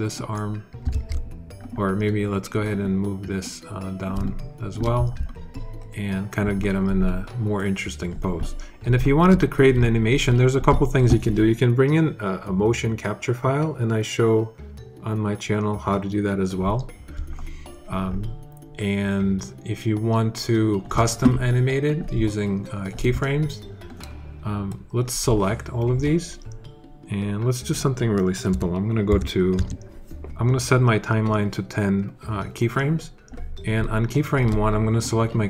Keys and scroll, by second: 0.8 super+z, 28.3 1, 28.9 0, 29.4 Return.